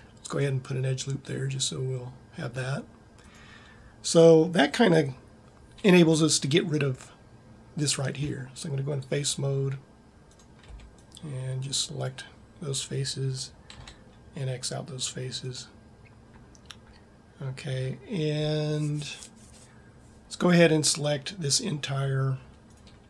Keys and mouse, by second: 9.1 click, 10.2 click, 11.1 b, 14.1 x.